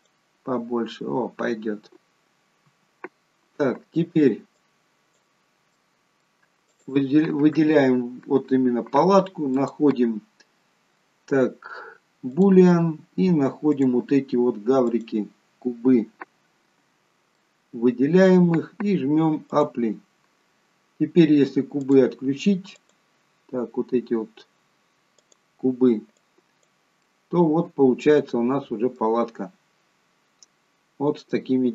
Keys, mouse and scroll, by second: 2.6 Tab, 4.5 click, 5.7 middle click, 6.6 click, 7.8 scroll up 2, 9.5 click, 13.6 click, 17.3 middle click, 19.7 click, 21.7 click, 25.2 click, 26.1 click, 26.9 middle click, 29.0-29.9 scroll up 8, 30.6-31.3 scroll down 1, 31.3 middle click.